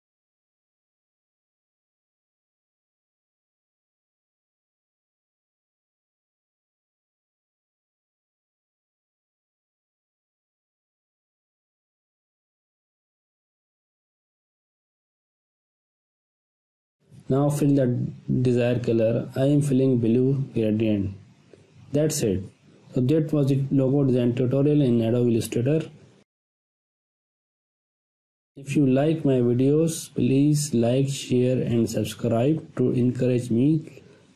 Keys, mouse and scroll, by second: 5.1 click, 9.4 click, 11.5 ctrl+space, 11.8 ctrl+alt+click, 13.3 ctrl+alt+click, 19.6 click, 22.0-22.3 scroll down 1, 22.3 space, 22.4-23.1 ctrl+click, 24.4-25.0 ctrl+drag, 26.1-26.7 ctrl+drag, 30.7 space, 30.9 click, 30.9-31.5 ctrl+click.